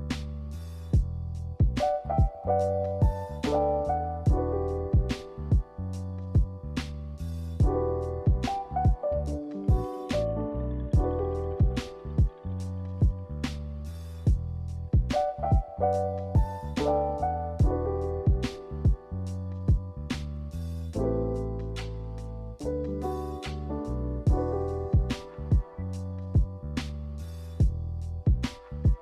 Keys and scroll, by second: 2.8-3.8 typing, 8.0 b, 24.9 n.